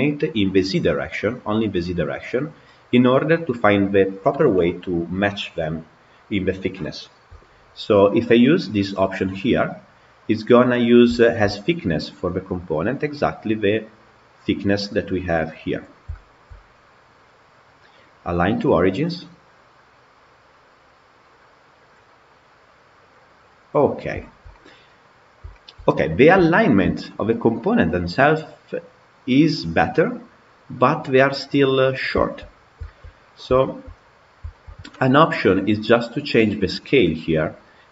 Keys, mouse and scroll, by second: 10.6-11.0 scroll down 7, 11.0-12.6 shift+middle drag, 12.6-15.7 scroll up 3, 15.8 scroll down 3, 16.0-16.8 shift+middle drag, 16.8-21.8 scroll up 1, 21.8-22.4 scroll up 1, 22.4-23.7 drag, 23.7-24.0 scroll up 3, 24.0-25.0 shift+middle drag, 25.0-25.4 scroll up 2, 25.4-25.7 shift+middle drag, 25.7-26.3 scroll up 6, 26.3-30.6 shift+middle drag, 30.6-31.5 scroll down 4, 31.5 scroll down 4, 32.0-32.3 shift+middle drag, 32.3 scroll down 3, 32.7-34.0 shift+middle drag, 34.0 scroll down 2, 34.4-37.4 shift+middle drag.